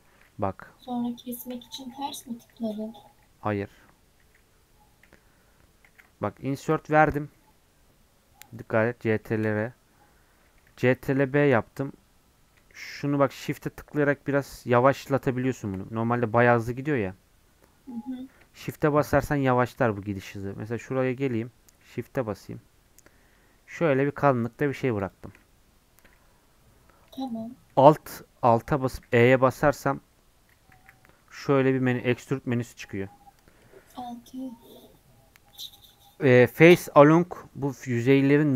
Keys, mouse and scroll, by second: 0.0-1.5 shift+middle drag, 1.5 ctrl+z, 1.8 ctrl+z, 2.1 ctrl+z, 2.3 ctrl+z, 2.7 ctrl+z, 3.0 ctrl+z, 3.4 ctrl+z, 3.7 ctrl+z, 4.2 ctrl+z, 5.9 ctrl+z, 6.5 ctrl+r, 9.2 shift+middle click, 10.0-10.7 scroll up 1, 10.7 ctrl+b, 25.5-26.2 scroll up 1, 26.2-28.8 shift+middle drag, 29.9-38.5 shift+middle drag.